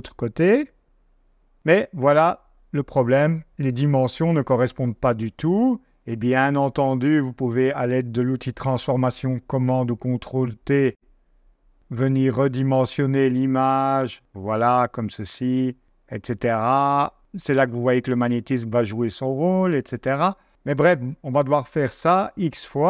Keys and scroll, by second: 4.9 -, 6.6 super+t, 7.9 -.